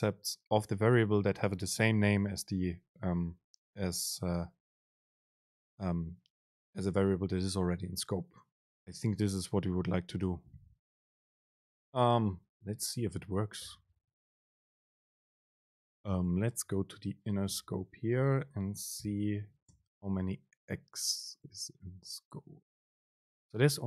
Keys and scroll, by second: 14.8 super+space, 16.0 Down, 17.6 Up, 18.3 End, 20.6 super+space.